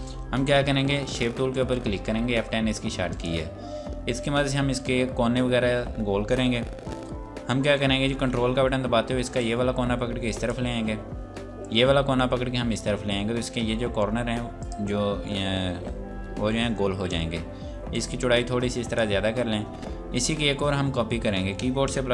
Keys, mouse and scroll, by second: 2.8 click, 4.2 scroll up 1, 9.4 ctrl+click, 11.6 ctrl+click, 14.4 click, 17.9 click, 20.8-22.1 scroll down 1.